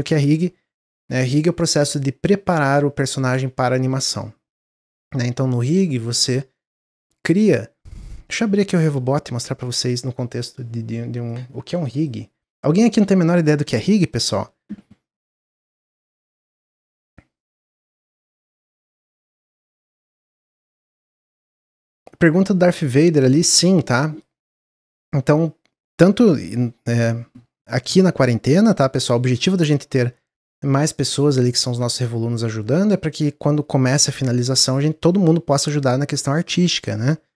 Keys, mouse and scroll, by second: 7.2-10.3 drag.